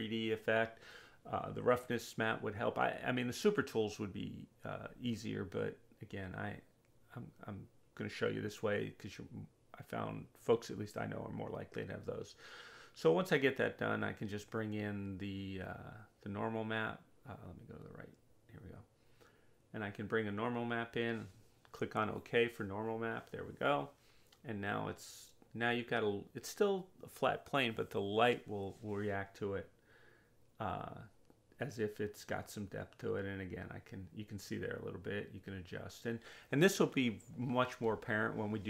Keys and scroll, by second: 24.1 alt+space.